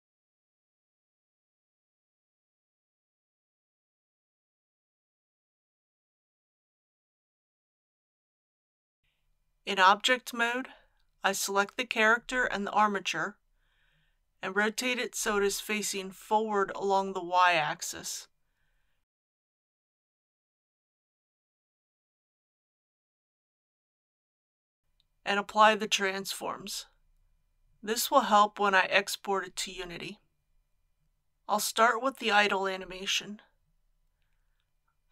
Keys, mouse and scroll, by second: 0.0 click, 2.4-3.8 typing, 4.4 Return, 9.4 Tab, 12.4 shift+click, 16.5 r, 17.7 z, 18.1 KP_1, 18.3 KP_8, 18.5 KP_0, 20.1-22.2 middle drag, 26.0 ctrl+a, 27.7-35.1 drag.